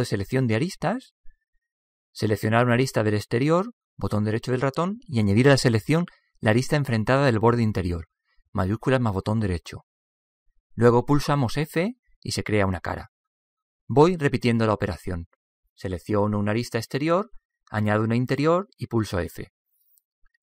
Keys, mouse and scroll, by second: 0.4-2.2 drag, 2.8-4.6 right drag, 8.3-12.3 right drag, 12.1 f, 12.8-15.0 middle drag, 16.5-18.3 right drag, 18.7-20.4 right drag, 19.7 f.